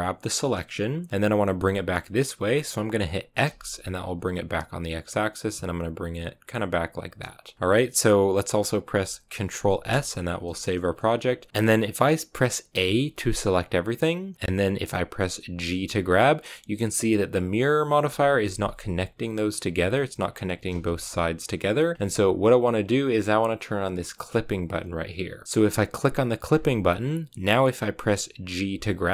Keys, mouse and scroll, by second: 11.5 KP_1, 12.6 a, 13.0 a, 15.6 g, 19.6 g, 20.7 z, 20.9 g, 25.4 z, 26.4-28.5 drag, 28.5 g.